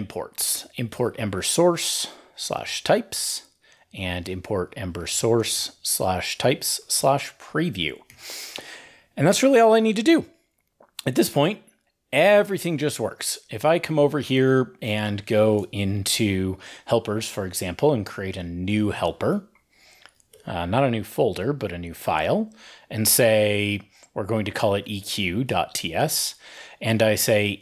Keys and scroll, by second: 2.9 ctrl+e, 7.4 ctrl+e, 7.9 super+s.